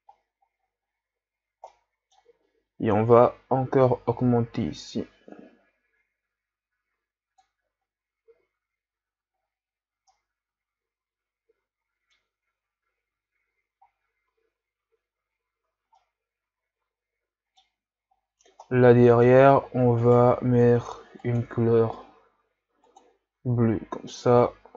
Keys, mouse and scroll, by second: 0.2-1.8 scroll up 5, 1.8-3.4 middle drag, 3.4-6.2 drag, 8.3 a, 9.4-10.1 scroll down 5, 10.1-12.8 middle drag, 12.8-14.4 scroll up 4, 14.4-15.3 scroll down 5, 15.3-15.8 shift+scroll up 4, 15.9-18.2 middle drag, 18.2-18.8 scroll up 3, 18.8-19.5 middle drag, 19.5-20.0 scroll up 1, 20.0 right click, 23.2 click, 23.6 a, 23.8 scroll down 3, 24.1-24.7 middle drag.